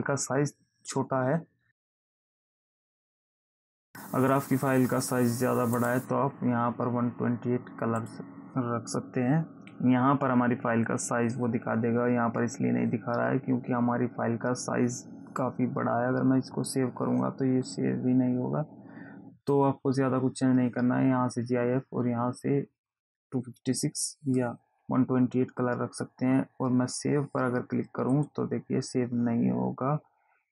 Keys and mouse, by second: 6.1 click, 8.3 click, 28.5 click.